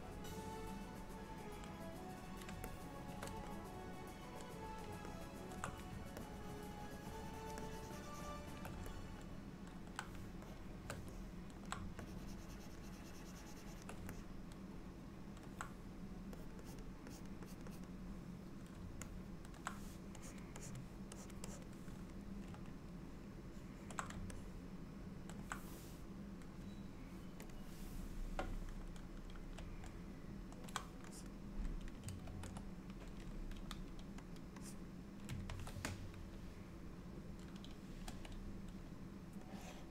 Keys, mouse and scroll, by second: 2.8 shift+middle click, 3.6 middle click, 5.2 ctrl+middle click, 6.3 ctrl+click, 7.7 ctrl+click, 9.0 middle click, 10.5 shift+click, 11.2 middle click, 12.1 ctrl+click, 12.9 ctrl+click, 14.2 middle click, 16.4 click, 16.7 click, 17.2 click, 17.5 click, 17.8 click, 19.1 middle click, 20.3 click, 20.7 click, 21.2 click, 21.5 click, 23.2 ctrl+middle click, 24.4 middle click, 27.5 click, 29.9 middle click, 31.2 click, 32.4 ctrl+z, 33.6 f, 34.7 click, 35.6 ctrl+z, 38.2 n, 39.6 click.